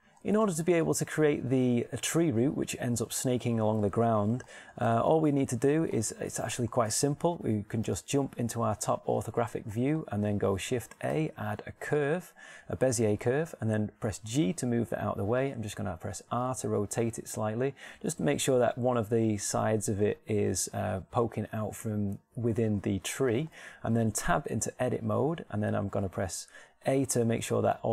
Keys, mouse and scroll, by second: 3.1-5.3 middle drag, 5.8-9.7 middle drag, 8.3 KP_7, 10.2 middle click, 11.5 shift+a, 15.3 g, 16.3-18.2 drag, 17.1 r, 25.1 Tab, 27.8 a.